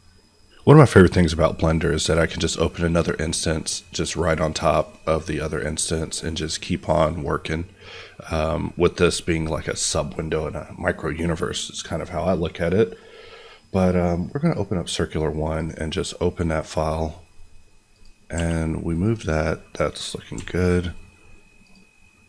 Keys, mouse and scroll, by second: 16.7-17.9 scroll up 1, 17.9 click, 18.3 g, 18.9 right click, 19.3 middle click, 20.3 n, 21.6 click.